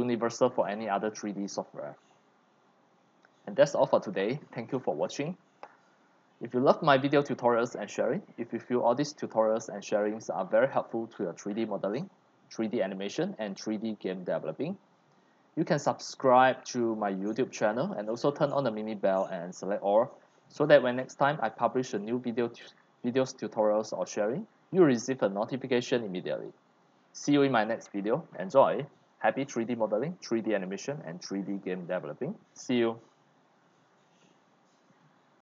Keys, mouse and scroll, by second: 2.1-2.6 drag, 4.4-7.1 drag, 14.3 click, 15.1 click, 17.1 click, 18.9 click, 19.8-20.8 scroll up 3, 20.9 middle click, 22.8-27.9 drag.